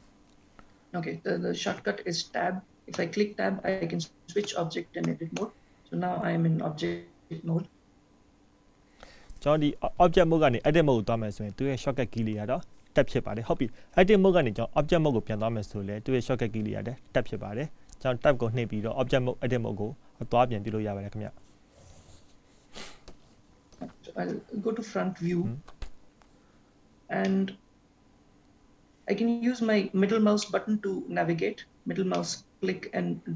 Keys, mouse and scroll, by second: 1.7 Tab, 3.1 Tab, 4.5 Tab, 5.1 Tab, 5.5 Tab, 17.2 middle click, 26.6-27.4 scroll up 1, 27.4 middle click, 32.6 middle click.